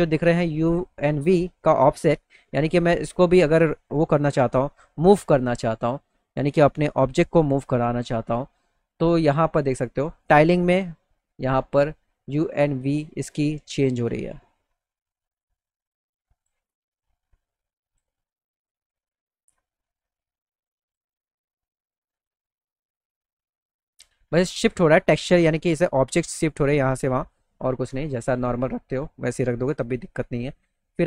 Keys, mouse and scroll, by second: 1.2 click, 2.7-4.3 drag, 6.4 click, 9.8 click, 12.7 click, 16.1 click, 17.5 click, 20.2 click, 24.7 click, 28.4 right click, 29.0 right click.